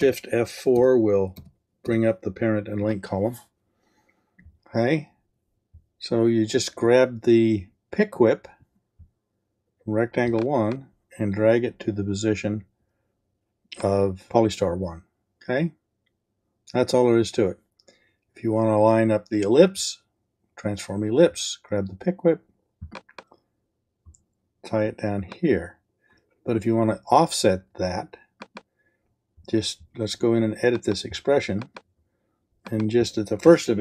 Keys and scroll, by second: 0.0 shift+F4.